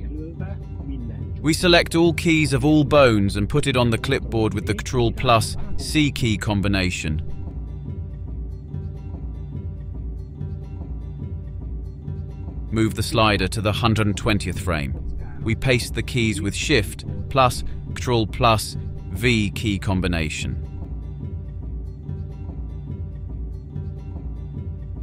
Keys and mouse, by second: 6.6 ctrl+c, 10.1-19.0 drag, 21.3 ctrl+shift+v, 24.1-25.0 drag.